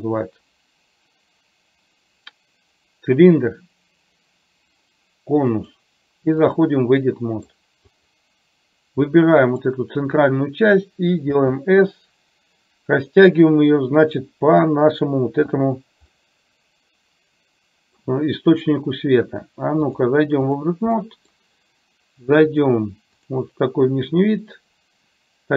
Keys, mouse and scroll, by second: 5.7-6.7 drag, 7.1 middle click, 7.9 click, 9.2 middle click, 11.5 s, 16.2-18.1 middle drag, 20.1 click, 21.1 middle drag, 23.4 click.